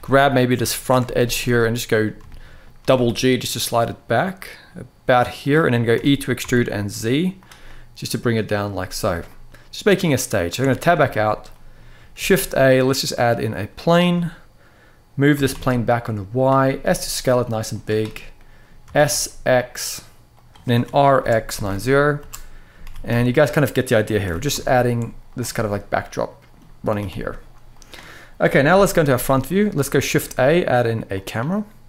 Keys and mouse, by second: 0.1 middle click, 0.5 shift+middle click, 0.9 shift+a, 1.3 middle click, 2.1 shift+middle click, 2.5 g, 2.8 g, 5.1 click, 5.6 e, 6.1 z, 7.1 click, 7.5-8.7 middle drag, 9.0 middle click, 10.3 Tab, 10.8-11.1 shift+middle drag, 11.2 middle click, 11.9 shift+a, 15.1 g, 15.2 y, 16.0 click, 16.5 s, 17.4 click, 18.1-18.4 middle drag, 18.6 s, 18.8 x, 20.0 click, 20.5 r, 20.9 x, 21.2 9, 21.3 0, 21.9 Return, 22.5 g, 22.8 z, 22.8 x, 23.6 right click, 23.9 g, 24.2 z, 25.0 click, 25.2-26.2 middle drag, 26.6 g, 26.8 y, 27.4 click, 28.4 KP_1, 29.3 shift+middle click, 29.8 shift+a.